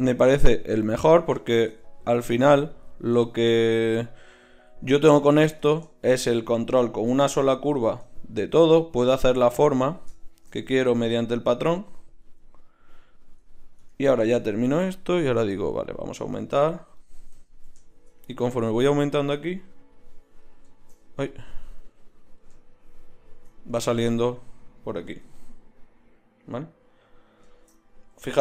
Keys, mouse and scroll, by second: 13.8 Tab, 19.0 click, 21.3-22.9 drag, 24.4-26.4 middle drag, 28.1 z.